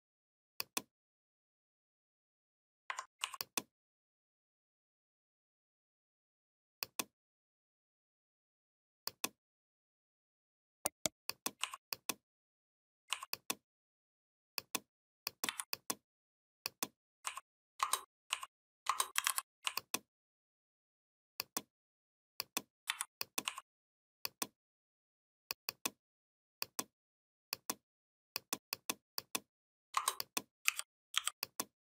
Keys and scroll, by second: 15.2 v, 19.0 shift+m, 22.6 v, 30.4 u, 30.9 i.